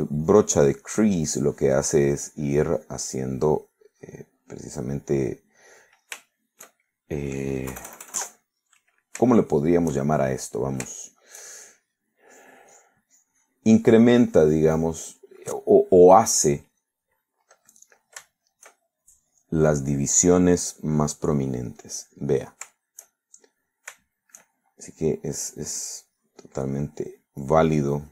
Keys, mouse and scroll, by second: 0.9-2.4 drag, 2.6-5.9 drag, 6.0 click, 7.2 scroll down 3, 7.4 shift+middle click, 8.8 KP_Add, 9.5 click, 10.4-11.6 shift+middle drag, 11.6-12.5 shift+scroll up 1, 12.5 shift+scroll up 1, 12.6 shift+middle click, 13.3 click, 13.8 click, 15.5 click, 16.8 middle click, 17.6 middle click, 18.1 middle click, 19.3 shift+middle click, 20.1-21.2 shift+drag, 22.3-23.6 drag, 23.8 shift+middle click, 25.1 shift+middle click, 25.5-25.9 shift+scroll up 1, 25.9 shift+click, 26.4 click, 26.9-28.1 drag.